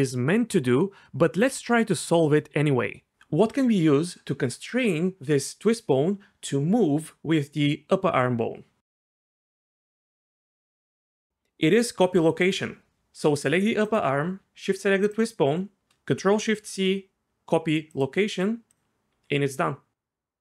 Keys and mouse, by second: 1.2-2.3 drag, 2.7 click, 12.9 ctrl+z, 13.8 click, 15.1 shift+click, 16.6 ctrl+shift+c, 19.1 g.